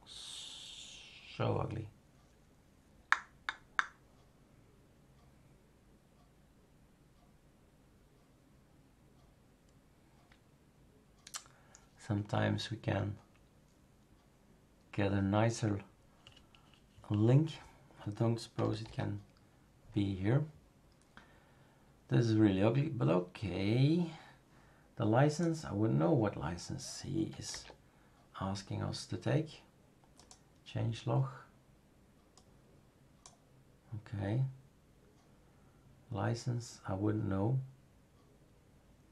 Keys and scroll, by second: 18.8 super+f, 27.5 super+f.